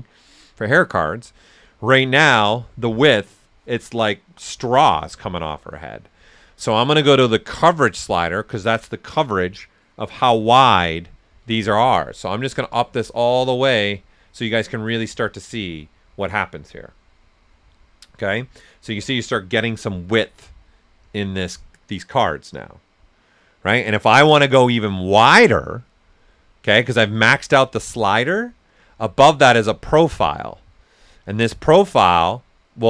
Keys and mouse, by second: 7.4 click, 9.5 typing, 12.4-17.5 drag, 17.5 right click, 29.5 click, 29.5 typing, 32.4-32.8 drag.